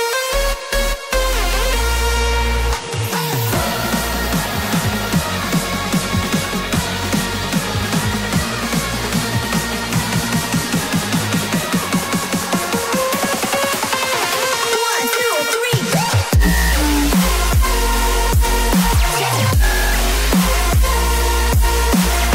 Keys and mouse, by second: 4.3 shift+middle click, 6.3 ctrl+r, 12.7 right click, 13.5-15.5 middle drag, 15.5 KP_1, 15.5 KP_3, 22.0 g, 22.1 z.